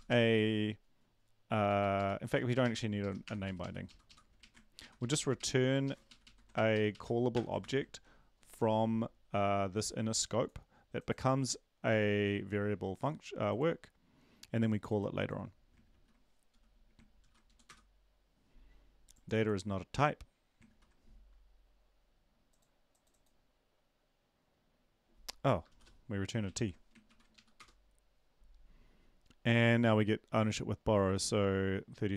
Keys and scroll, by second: 0.1 Down, 2.2 Down, 2.2 Up, 3.0 shift+Left, 3.2 BackSpace, 3.4 Up, 3.6 Up, 3.8 Left, 4.4 Right, 4.8 Right, 5.0 Right, 5.4 Right, 6.1 ctrl+Left, 6.2 ctrl+shift+Right, 6.5 ctrl+shift+Right, 7.6 shift+Left, 17.2 ctrl+l, 17.5 Up, 17.6 Return, 20.7 ctrl+`, 26.5 ctrl+s, 27.1 ctrl+`, 27.3 Up, 27.6 Return.